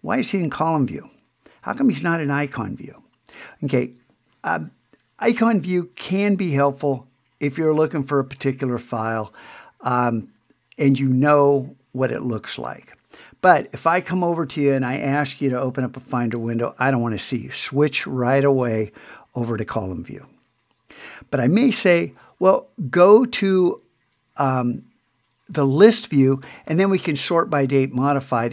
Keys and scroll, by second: 1.7 super+1, 18.7 super+3, 23.5 super+2.